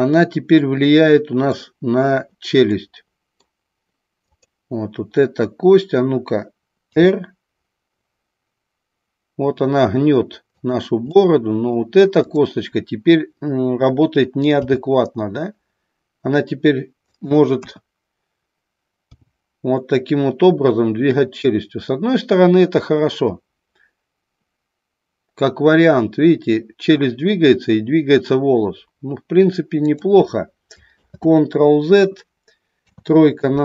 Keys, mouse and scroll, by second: 0.2-1.5 middle drag, 2.8 scroll up 1, 3.0-3.5 middle drag, 4.2 click, 6.8 r, 10.6 click, 11.2-11.9 middle drag, 14.6 g, 17.2 click, 17.6 KP_1, 19.2 g, 29.9 click, 31.0 ctrl+z, 32.8 KP_3.